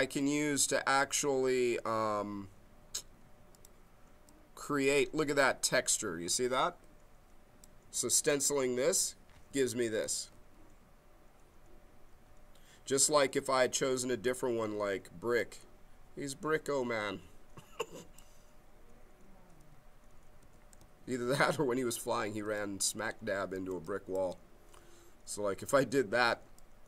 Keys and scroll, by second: 9.4 q, 12.1 ctrl+z, 19.5 q, 21.2 ctrl+z.